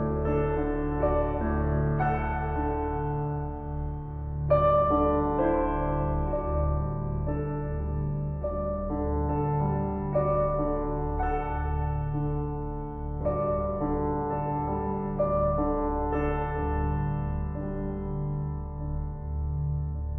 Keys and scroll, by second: 14.5 ctrl+t.